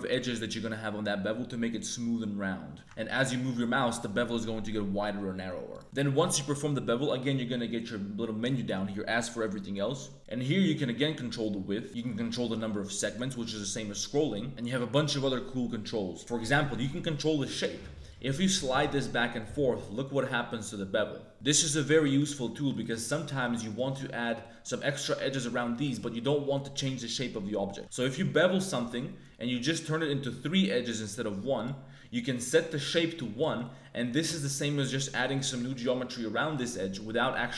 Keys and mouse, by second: 2.8 ctrl+z, 2.8 ctrl+b, 5.8 click, 10.3-11.8 drag, 11.9-13.1 drag, 18.1-21.3 drag, 22.0 ctrl+z, 22.5 2, 22.7 click, 23.0 shift+click, 23.3 click, 23.6 click, 23.9 middle click, 24.4 click, 25.5 click, 27.5 click, 27.8 ctrl+b, 32.8 click, 33.6 click, 34.2 a, 34.4 a, 34.4 click, 34.7 click, 35.7 click, 36.5 middle click, 37.1 click, 37.3 Tab, 37.4 click.